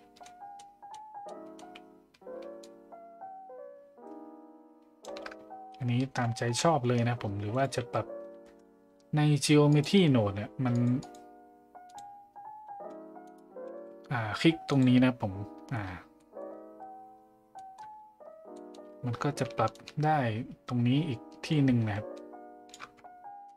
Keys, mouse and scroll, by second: 0.5-0.9 middle drag, 1.3 middle drag, 2.6-5.0 shift+drag, 5.7-6.0 middle drag, 9.7-10.9 drag, 11.0-12.0 drag, 14.7 click, 16.2 middle click, 17.5 middle click, 18.6 middle click, 19.7-22.7 shift+drag, 23.3 middle click.